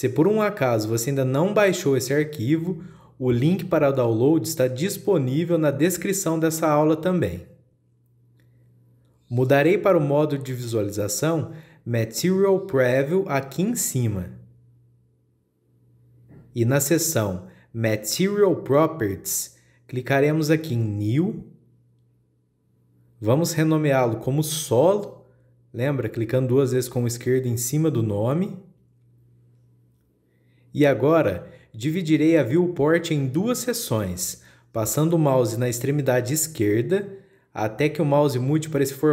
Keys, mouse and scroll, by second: 4.9-5.5 scroll up 1, 5.5-6.7 scroll down 1, 15.7 click, 21.1 click, 23.3-28.0 drag, 32.6-35.8 shift+middle drag.